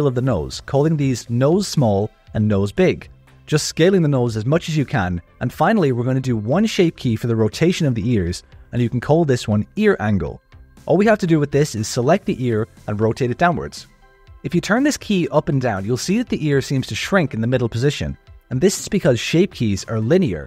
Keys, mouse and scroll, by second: 0.0 ctrl+KP_Add, 0.2 s, 1.6 Tab, 1.9 click, 2.3 shift+click, 2.7 l, 2.9 click, 3.1 Tab, 3.2 s, 4.2 Tab, 4.6 click, 5.6 click, 6.2 shift+click, 6.7 click, 6.8 Tab, 6.9 z, 7.0 alt+a, 7.0 c, 7.8 z, 8.1 shift+right click, 8.5 r, 10.1 Tab, 10.8-12.1 drag, 12.3 click, 12.5 Tab, 12.6 click, 12.7-13.9 typing, 13.1 click, 13.3 Tab, 13.3 Tab, 13.6 click, 14.2 click, 14.6-20.4 drag.